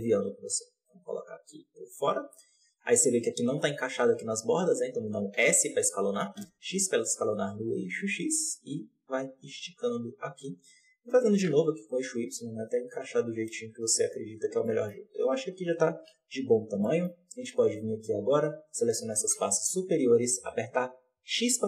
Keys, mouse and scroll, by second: 5.2 s, 10.9 s, 14.3 scroll down 2, 14.5 middle click, 14.9 z, 16.0 KP_Decimal, 16.7-18.2 middle drag, 18.2 click, 18.6 right click, 19.0 shift+right click, 19.3 x.